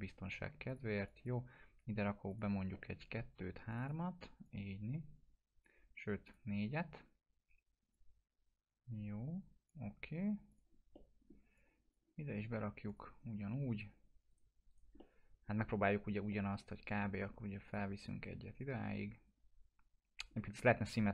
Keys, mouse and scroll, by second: 2.7 middle click, 3.7-5.7 drag, 10.9-12.1 middle click, 11.5-12.8 drag, 14.3 right click, 15.2-15.9 middle drag, 17.6-20.6 drag, 20.3-21.1 middle drag.